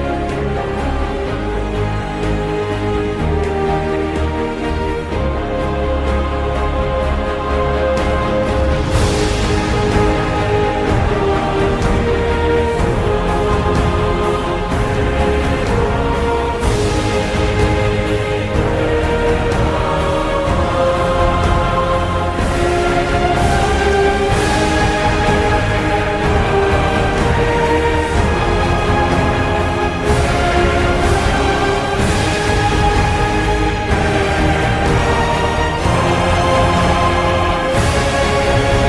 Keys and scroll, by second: 2.2 x, 2.5 2, 4.5 x, 4.8 3, 10.3-24.4 typing, 25.1 Return, 28.9 Up, 29.3 F2, 30.1 ctrl+a, 30.4 ctrl+c, 31.6 Escape, 32.3 ctrl+Page_Down, 33.5 F2, 34.4 ctrl+v, 37.5-38.4 typing.